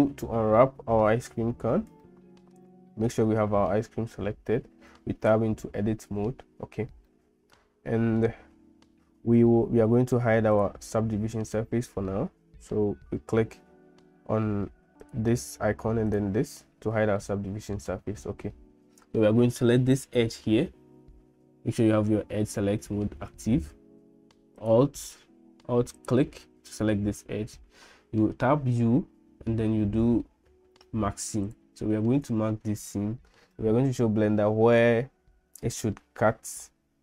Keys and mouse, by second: 0.6 middle click, 2.0 shift+middle click, 5.0 Tab, 7.1-8.2 middle drag, 10.5 click, 15.1 click, 17.2 middle click, 24.6 click, 26.0 alt+click, 28.7 u.